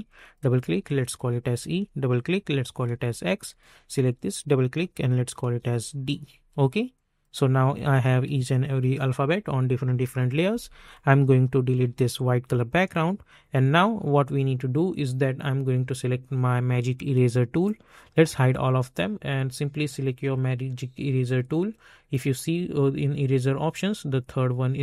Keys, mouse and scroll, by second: 0.0 click, 0.6 shift+e, 1.1 Return, 1.4 click, 2.3 shift+x, 3.4 click, 4.9 shift+d, 5.4 Return, 6.9 click, 10.8 click, 17.6 click, 17.7-24.8 drag.